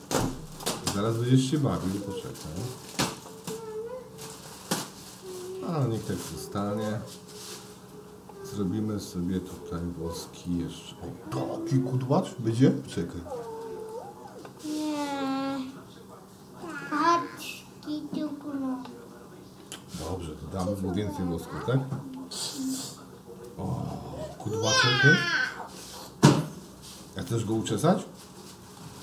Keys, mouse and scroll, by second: 3.1 click, 7.6 click, 10.4 click, 14.4 click, 15.3-16.7 middle drag, 19.7-23.9 drag, 25.4-29.0 middle drag.